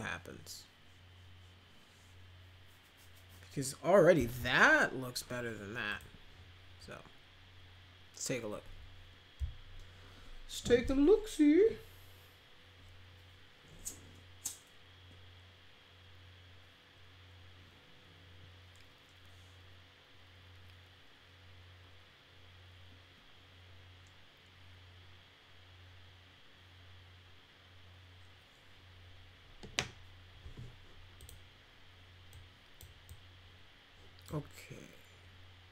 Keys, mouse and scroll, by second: 5.8 click, 31.1 click, 32.3 click, 33.0-34.2 drag.